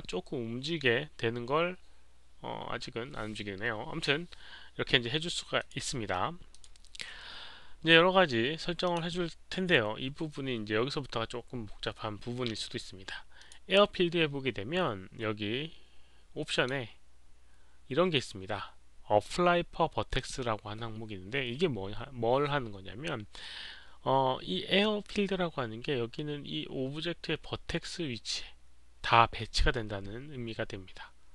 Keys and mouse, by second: 2.4 click, 5.6 click, 6.5 click, 8.8 click, 13.3 click, 16.5 click, 17.3 click, 20.1 click, 24.2 click, 27.4 click.